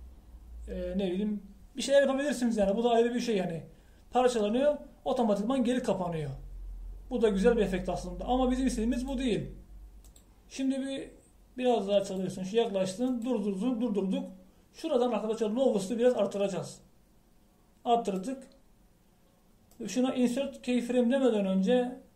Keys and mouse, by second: 10.0-11.2 drag.